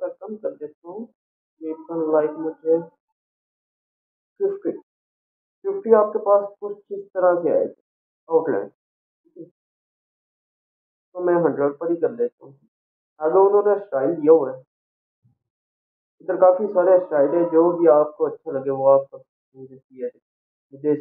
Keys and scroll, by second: 5.2 5, 5.3 0.